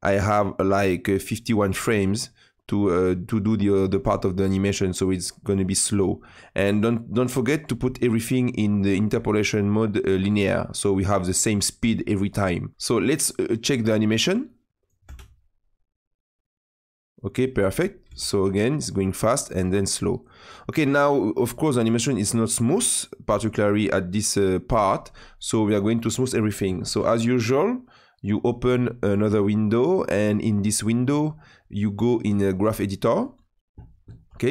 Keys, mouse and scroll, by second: 6.2-10.4 drag, 10.4-12.2 right drag, 12.2-15.0 drag, 15.0 space, 18.0 space, 18.3-23.7 drag, 28.4-34.5 drag.